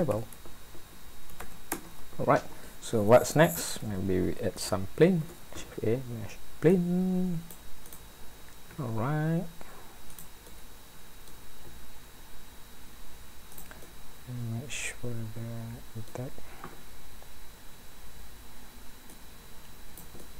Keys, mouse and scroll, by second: 1.0 click, 5.2 shift+a, 8.7 s, 10.5 middle click, 11.6 s, 13.8 middle click, 19.1 click, 20.2 middle click.